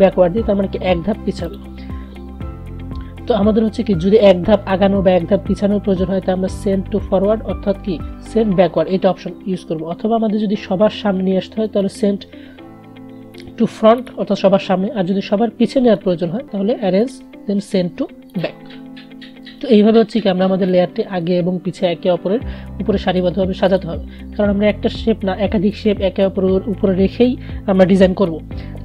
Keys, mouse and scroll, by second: 0.6 click, 1.6 click, 11.8 right click, 13.5 click, 16.0 right click, 17.2-23.3 drag, 23.8 click.